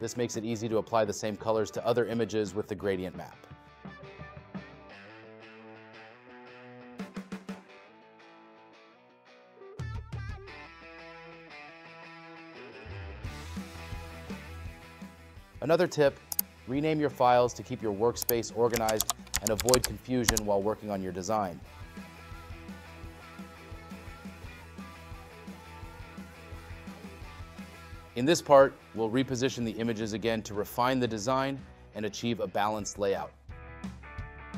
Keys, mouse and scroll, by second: 5.8 space, 7.7 space, 16.2 right click, 22.0 right click.